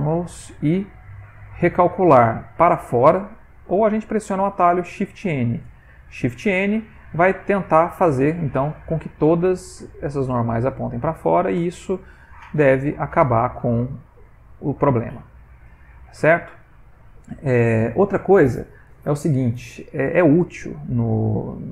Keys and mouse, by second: 8.1 middle click, 12.2 Tab, 12.4 middle click, 13.1 middle click, 15.2 ctrl+middle click, 15.2 ctrl+middle click, 15.9 middle click, 16.4 shift+middle click, 20.7 ctrl+middle click, 20.7 ctrl+middle click, 21.3 shift+middle click, 21.4 shift+middle click.